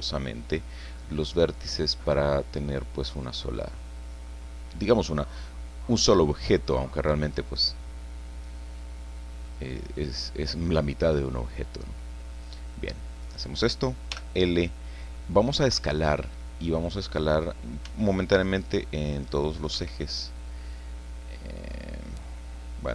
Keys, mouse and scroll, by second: 1.2-1.6 scroll up 2, 1.6-1.9 scroll down 2, 2.1-5.2 drag, 5.4 scroll down 1, 5.7 click, 6.4 middle click, 8.3 click, 9.4 middle click, 10.2-10.5 scroll up 1, 10.7-11.0 scroll down 1, 13.2 right click, 14.1 l, 17.5-17.8 scroll down 1, 17.8 s, 19.7 Escape.